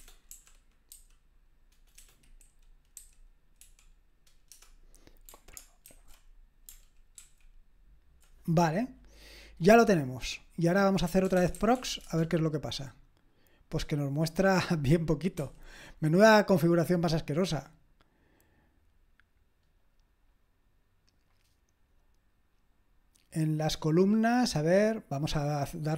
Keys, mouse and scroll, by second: 0.0-0.9 typing, 2.0-4.1 typing, 4.5 Return, 5.3-7.7 typing, 10.8-12.2 typing, 15.4 typing.